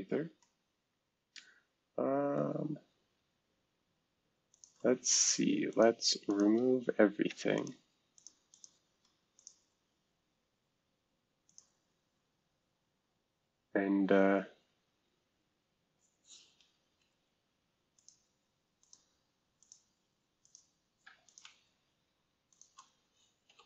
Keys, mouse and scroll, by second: 0.7-2.2 scroll up 2, 4.5 click, 5.7 shift+click, 6.3 shift+click, 7.5 ctrl+click, 8.1 ctrl+click, 8.5 ctrl+click, 9.4 click, 11.5 click, 14.5 click, 17.0 Delete, 17.9 click, 18.9 click, 19.6 click, 20.4 click, 21.2 click, 23.5 Delete.